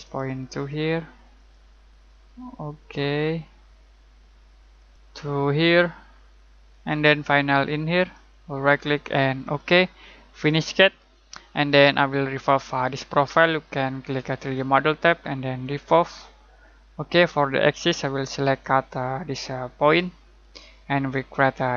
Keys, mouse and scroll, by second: 4.7 click, 6.7 click, 8.6 right click, 9.4 click, 14.5 click, 19.8 click.